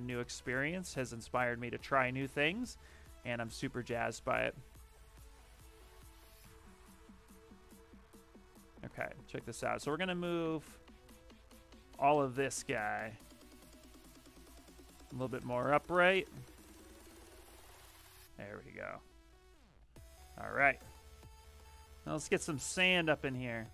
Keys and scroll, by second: 0.0-1.0 typing, 4.4 w, 17.6 q, 23.6 shift+f.